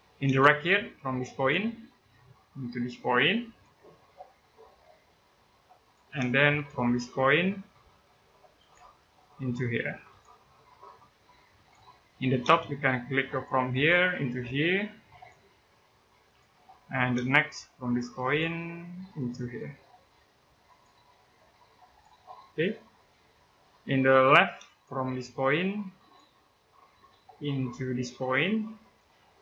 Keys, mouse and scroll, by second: 0.1 space, 1.1 click, 1.4 scroll down 1, 1.6 middle click, 2.1-3.2 scroll up 1, 3.2 click, 6.0 space, 7.6-8.4 scroll up 1, 8.4 click, 8.7 scroll down 1, 8.8 middle click, 9.9 click, 11.7 middle click, 12.2 space, 13.5 click, 16.4 middle click, 16.9 space, 18.0 click, 20.5 click, 22.9 scroll down 1, 23.1 middle click, 24.0-24.4 scroll up 1, 24.4 space, 25.7 click, 26.7 middle click, 27.3 scroll up 1, 28.6 click.